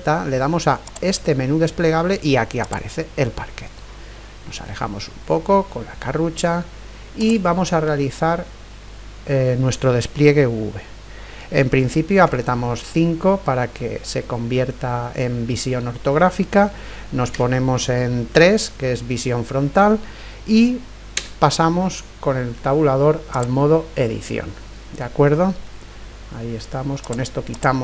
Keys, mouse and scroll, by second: 1.6-2.8 drag, 5.7-6.9 middle drag, 5.7-6.3 scroll down 1, 6.3-6.9 scroll up 1, 7.2-8.9 right drag, 7.8-11.8 middle drag, 9.0 right click, 12.2 KP_5, 13.6-15.4 middle drag, 17.3 KP_3, 19.1-21.4 middle drag, 19.1-19.5 scroll up 1, 21.2 Tab, 24.4-26.4 middle drag, 27.0-27.8 drag.